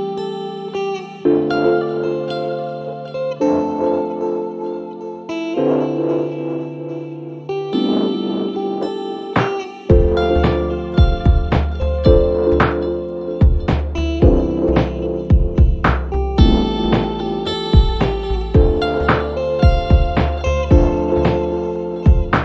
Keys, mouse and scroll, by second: 0.6 click, 1.4 click, 2.1 click, 3.1-5.7 typing, 7.4 click, 8.0 click, 8.9 click, 9.9 right click, 10.5 click, 11.4 click, 11.9 click, 12.6-14.0 typing, 15.4 click, 15.7 click, 18.3 click, 20.4 click, 21.6 click.